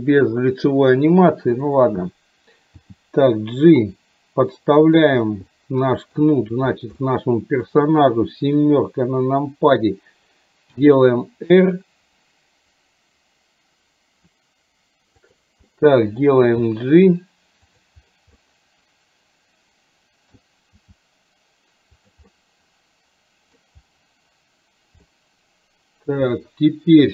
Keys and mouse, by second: 2.8 g, 5.6 middle click, 7.1 middle click, 8.5 KP_7, 10.8 r, 15.8 middle click, 16.5 g, 18.4-20.4 middle drag, 20.8 g, 22.3-23.8 middle drag, 25.2 middle click.